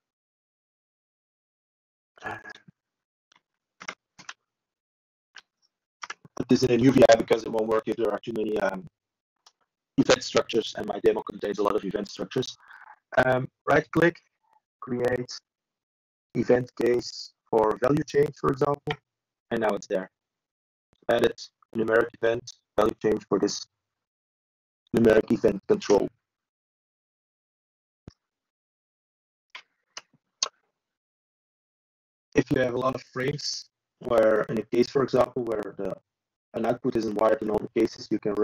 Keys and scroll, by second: 8.1 ctrl+i, 12.7 ctrl+h, 17.6 ctrl+space, 19.1 ctrl+7, 23.7 ctrl+h, 27.8 ctrl+h, 30.1 ctrl+space, 30.7 ctrl+7, 33.6 ctrl+i, 37.9 ctrl+h.